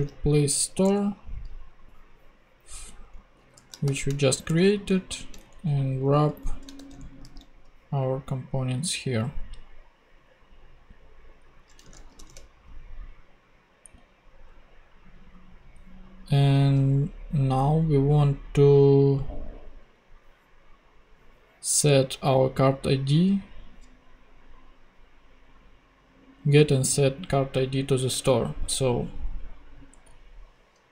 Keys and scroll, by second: 0.0-0.2 typing, 0.8 Return, 3.1 super+Right, 3.7 shift+super+Right, 3.8 shift+super+., 4.4 shift+Return, 4.9 Down, 6.1 alt+shift+Down, 6.2 alt+shift+Up, 6.7 alt+shift+Tab, 7.0 Down, 12.1 shift+super+p.